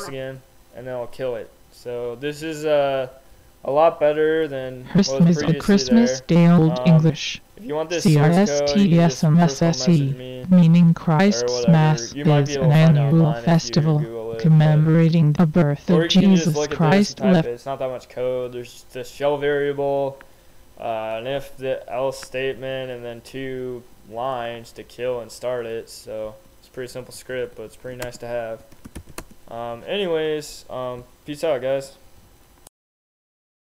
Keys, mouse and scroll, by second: 0.1 alt+x, 2.4 F12, 4.5 F12, 8.0 j, 9.7 k, 11.0 j, 12.5 k, 14.8 k, 15.8 j, 19.2 j, 22.5 j, 25.6 j, 27.5-29.7 typing.